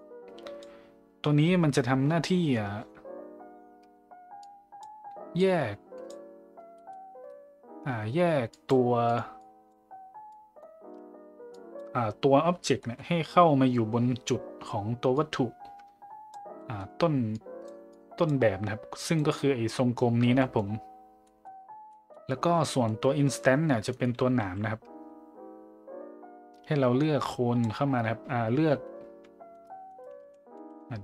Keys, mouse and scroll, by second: 4.4-4.8 drag, 5.4-6.1 drag, 6.7 middle click, 8.5 drag, 9.1 click, 9.4-9.7 drag, 10.3 click, 11.5 click, 12.8 middle drag, 15.1-16.3 drag, 16.6 middle click, 17.3-17.7 drag, 17.9 click, 19.0 click, 20.4 middle drag, 21.3 middle click, 21.9 middle click, 22.7 middle click, 27.2 click, 30.2 ctrl+z, 30.6 ctrl+z.